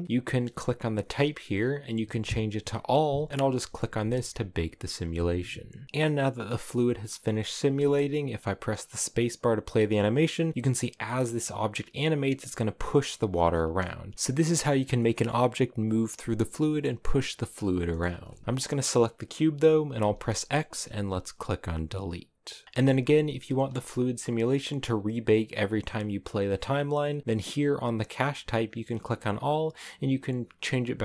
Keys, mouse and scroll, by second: 2.7-5.8 drag, 5.8-8.3 middle drag, 8.3 space, 11.5-12.9 scroll up 1, 12.9 middle click, 13.4 space, 13.5 middle click, 13.9 scroll up 3, 14.1 space, 14.8-18.4 middle drag, 18.4 space, 21.1 x, 21.6-22.6 middle drag, 22.6 space, 23.2 space.